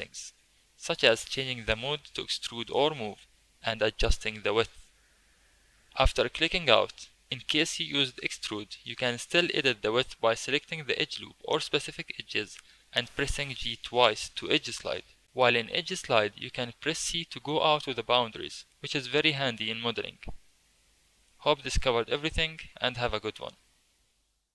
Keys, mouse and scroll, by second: 5.3 2, 9.7 alt+click, 11.5 g, 18.3 Tab, 19.0-20.0 shift+middle drag, 20.0 click.